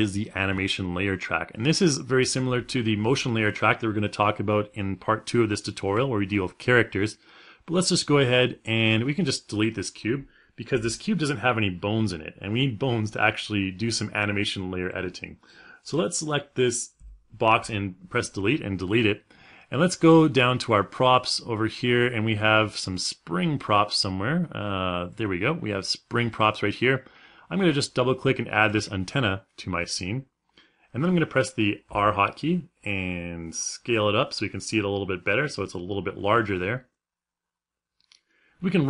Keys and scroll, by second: 16.8 Delete, 31.5 r.